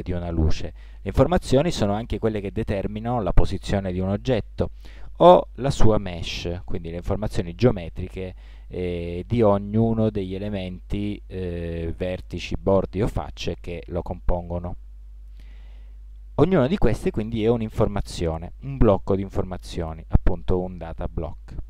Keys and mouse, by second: 6.8 Tab, 15.2 Tab.